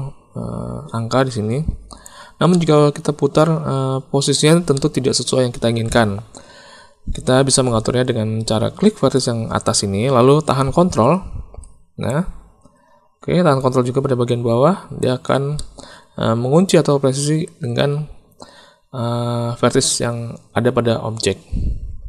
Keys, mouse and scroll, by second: 2.6-4.5 drag, 4.7 shift+middle click, 5.2 middle click, 9.1-12.0 drag, 13.6-15.0 ctrl+drag, 15.5 click, 15.7-17.4 middle drag.